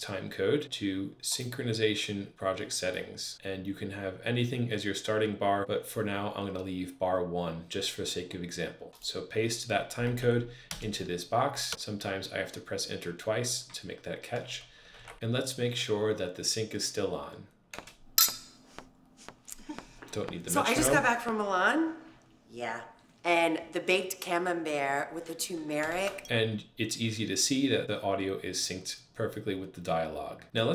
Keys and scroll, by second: 9.9 super+v, 10.5 Return, 14.8 super+`, 20.6 k, 25.9 Return.